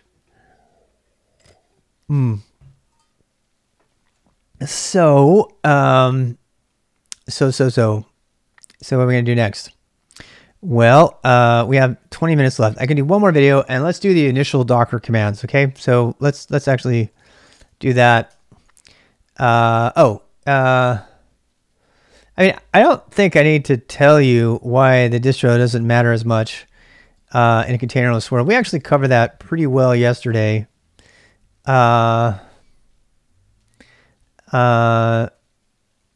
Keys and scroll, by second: 10.9-13.3 typing, 17.0-18.8 typing, 18.0 Tab, 18.0 Return, 18.3 ctrl+[, 20.0 k, 21.2 typing, 23.7-24.5 typing, 27.5-31.7 typing, 33.0-36.1 typing.